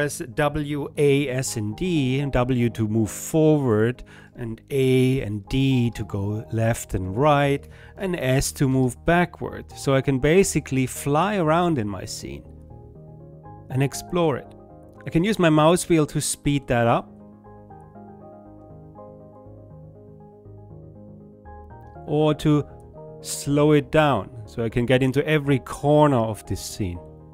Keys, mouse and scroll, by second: 11.5 click, 11.5 middle click, 11.6 right click, 11.8 click, 11.8 middle click, 12.2 right click, 12.4 click, 12.4 middle click, 12.4 right click, 12.6 click, 12.6 middle click, 12.6 right click, 12.8 click, 12.8 middle click, 13.0-15.4 right drag, 15.8 middle click, 15.8 right click, 16.3 click, 16.3 middle click, 16.3 right click, 16.4 click, 17.0 middle click, 17.0 right click, 17.2 click, 17.4 middle click, 17.4 right click, 17.6-18.6 drag, 18.6 middle click, 18.6 right click, 18.7 click, 18.8 middle click, 18.8 right click, 19.2 click, 19.7 middle click, 19.7 right click, 19.7 click, 19.9 middle click, 19.9 right click, 20.1 click, 20.1 middle click, 20.1 right click, 20.1-23.0 drag, 23.0 middle click, 23.0 right click, 23.3 click, 23.4 middle click, 23.4 right click, 23.6 click, 23.6 middle click, 23.6 right click, 23.8-25.1 drag, 25.1 middle click, 25.1 right click, 25.5 middle click, 25.5 right click, 25.7 click, 26.5 click.